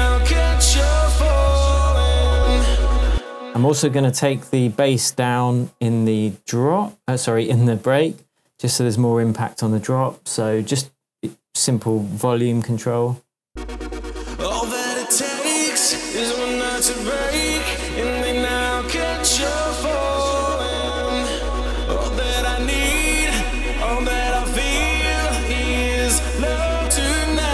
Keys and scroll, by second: 2.1 super+z, 3.0 super+space, 13.4 space.